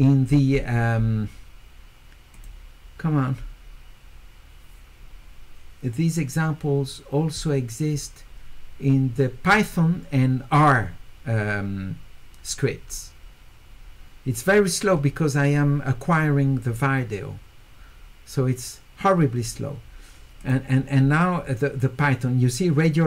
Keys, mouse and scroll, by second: 2.3 click, 20.4 click.